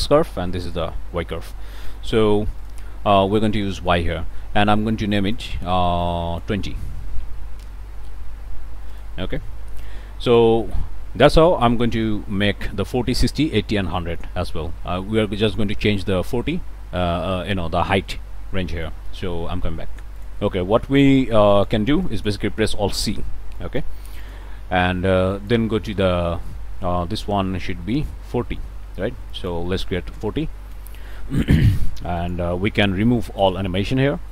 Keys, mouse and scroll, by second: 0.6 click, 2.6 click, 5.3 click, 6.0 click, 6.8-7.7 typing, 8.9 click, 9.2 scroll up 1, 9.2-10.9 drag, 10.9 scroll up 1, 11.2-11.6 scroll down 1, 14.0-14.4 scroll down 1, 14.4 scroll up 1, 14.7 click, 18.7 middle click, 20.2 click, 21.6 click, 22.0 click, 23.0 alt+c, 23.6 alt+click, 24.1 click, 25.3 click, 28.3 click, 29.3 click, 29.8-30.6 typing, 32.2 click, 33.4 click.